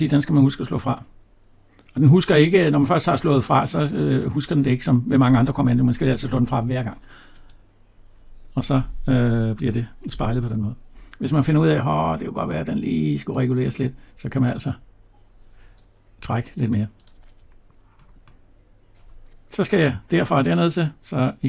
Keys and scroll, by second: 9.4 Escape.